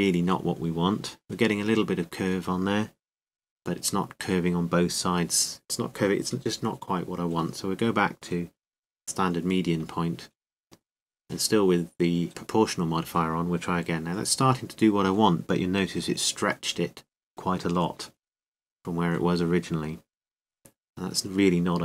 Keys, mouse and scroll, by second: 8.1-12.3 drag, 12.3 r, 14.8-16.5 drag, 16.5-18.3 middle drag, 19.3-21.8 drag.